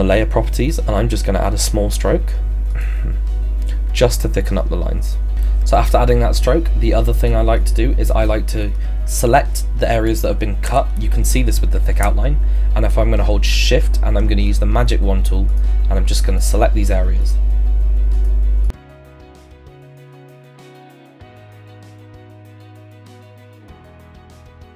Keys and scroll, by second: 20.3 ctrl+z, 22.5 ctrl+z.